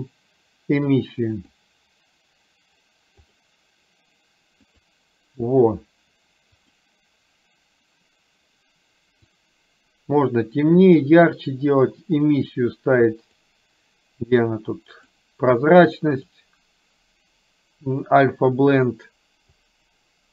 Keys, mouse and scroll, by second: 3.4 click, 15.1-16.5 drag, 19.8-20.3 drag.